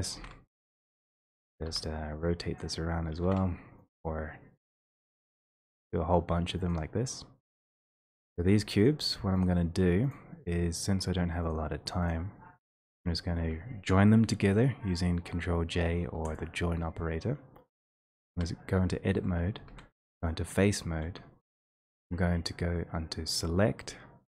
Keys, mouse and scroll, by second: 4.5 click, 7.0 click, 10.6 shift+click, 16.4 click, 18.3 2, 19.6 v, 23.4 click.